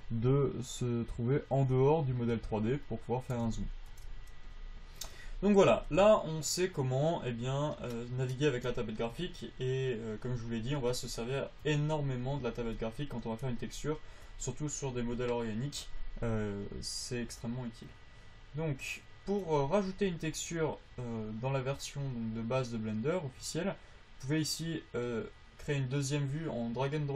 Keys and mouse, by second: 4.8 middle click, 19.1 middle click, 19.4-21.0 drag, 25.4-27.0 drag.